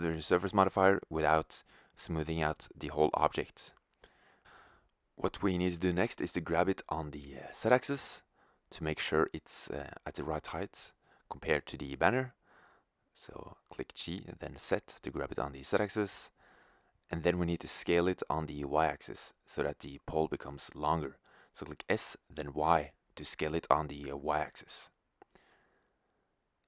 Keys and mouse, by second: 1.1 Tab, 2.0 s, 4.6 g, 6.5-8.5 drag, 12.3-14.5 drag, 12.9 g, 14.8-15.7 middle drag, 18.2-19.4 middle drag, 19.4 click, 19.4 s, 20.0-22.1 drag, 21.1 s, 25.9-26.6 drag.